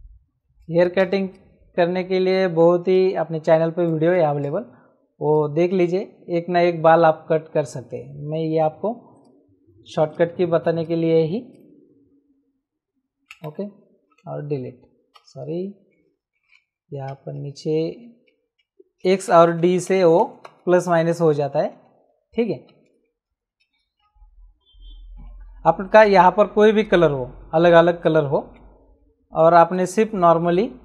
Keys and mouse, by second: 0.7 space, 0.7 click, 1.3 click, 2.9 shift+click, 4.1 click, 5.3 shift+click, 9.1 click, 10.8 right click, 11.5 click, 13.3 Return, 13.3 KP_Enter, 14.1 Delete, 15.1 ctrl+z, 17.1-24.5 typing, 25.9 click, 28.0 click, 28.4 Return, 29.7 click.